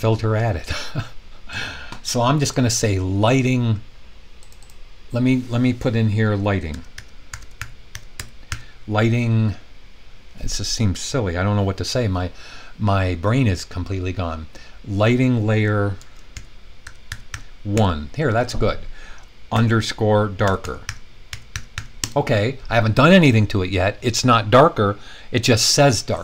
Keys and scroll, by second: 6.4-8.9 typing, 16.0-17.7 typing, 19.5-21.7 typing, 22.0 Return.